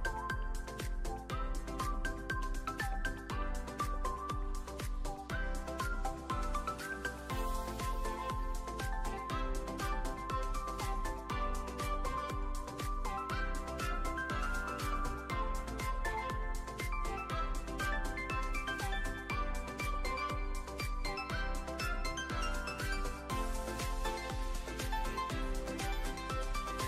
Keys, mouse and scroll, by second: 0.0 alt+middle click, 0.5 `, 2.4 click, 3.6 alt+middle click, 4.9 e, 5.1 s, 6.7 click, 7.2 f, 8.2 ctrl+f, 10.3 click, 10.4 click, 10.7 `, 13.1 e, 13.4 z, 14.7 click, 14.8 s, 15.7 click, 16.0 shift+middle click, 16.6 click, 17.5 Tab, 18.0 alt+z, 18.0-18.5 alt+middle drag, 18.5 alt+z, 19.1-19.8 alt+middle drag, 19.9-20.3 middle drag, 20.5 ctrl+a, 22.0-23.3 drag, 23.5 alt+middle click, 24.8-26.2 drag.